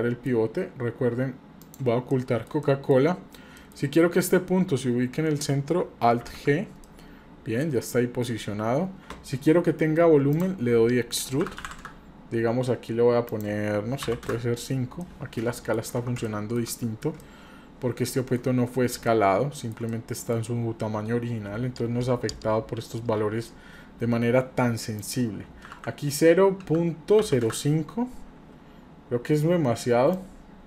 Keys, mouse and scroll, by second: 1.6 click, 2.1-2.9 middle drag, 3.6 middle click, 6.2 alt+g, 6.8-8.3 middle drag, 8.4 scroll up 1, 10.3-12.1 drag, 13.3-14.3 drag, 15.0-15.7 middle drag, 16.3 shift+middle drag, 16.7 middle click, 17.2-18.4 shift+middle drag, 19.0-19.7 shift+middle drag, 19.9 middle click, 25.0-27.5 drag, 30.2-30.6 drag.